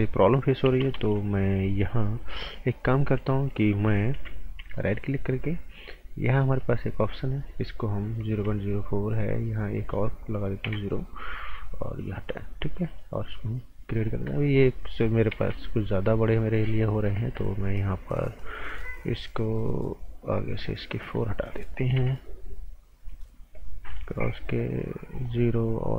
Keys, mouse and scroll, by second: 4.1 b, 4.7 alt+right click, 6.6 click, 10.6 KP_0, 12.9 click, 15.3 ctrl+z, 16.2 click, 20.5 click, 21.9 BackSpace, 23.8 click.